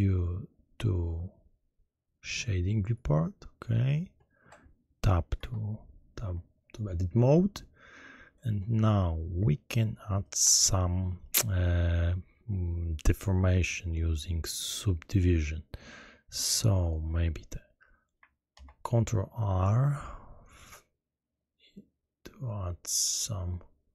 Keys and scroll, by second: 5.3 Tab, 18.5 ctrl+r.